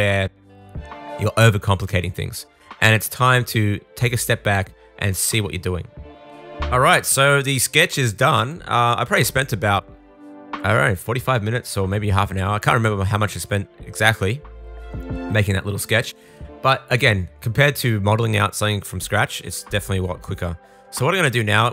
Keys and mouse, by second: 7.3-17.5 middle drag, 13.0 super+s, 17.5 click, 17.6 middle click, 18.5-21.7 drag.